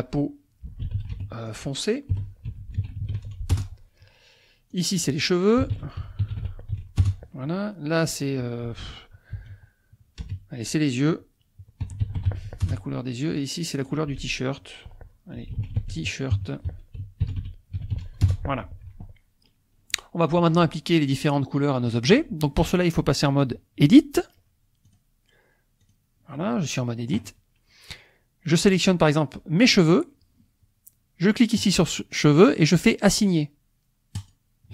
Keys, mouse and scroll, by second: 0.6 p, 0.9 e, 0.9 a, 1.2 u, 2.5-3.1 typing, 3.5 Return, 4.7 click, 5.7-6.7 typing, 7.0 Return, 8.0 click, 9.5 n, 10.2 BackSpace, 11.8 y, 12.0 e, 12.2 u, 12.3 x, 12.6 Return, 13.7-15.1 drag, 15.5-17.9 typing, 18.2 Return, 24.9 click, 25.8 click, 28.6 click, 31.6 click, 34.2 click.